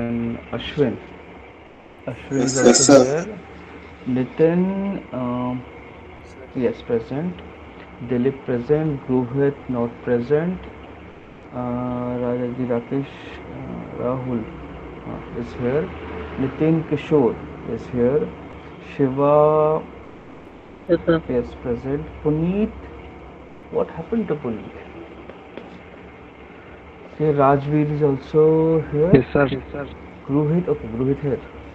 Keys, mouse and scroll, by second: 7.8 middle click, 8.4 middle click, 10.3 click, 23.3 click, 26.1 middle click, 31.4 click.